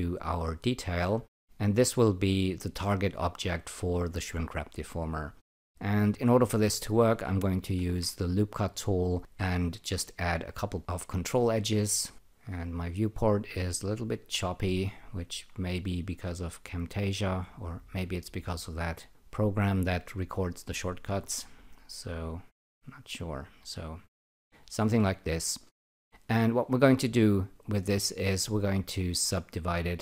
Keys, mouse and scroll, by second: 1.8 click, 6.1 alt+right click, 7.6-8.4 typing, 9.2 click, 10.8 click, 14.0 click, 14.9 alt+click, 22.7 click, 23.3 alt+click, 24.6 alt+right click, 29.2 alt+click.